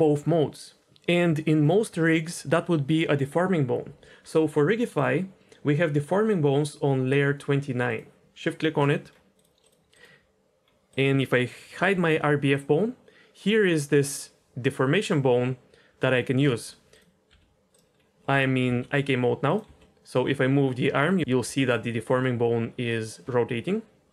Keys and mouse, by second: 4.9 click, 7.9 shift+click, 9.6 click, 10.8 click, 11.9 h, 17.3 r, 18.6 g, 19.6 r, 21.2 ctrl+z, 21.2 d, 21.4 d, 21.6-23.0 drag, 23.0 d, 23.1 d.